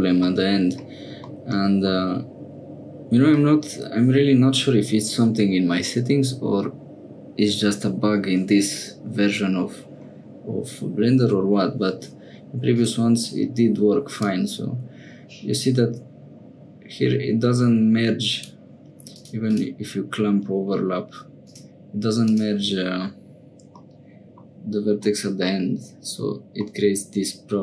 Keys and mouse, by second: 0.3 middle click, 1.3 middle click, 12.7 click, 14.2-18.4 drag, 19.1 click, 19.5 click, 21.4 click, 23.8 middle click, 25.1 middle click, 26.6-27.6 middle drag.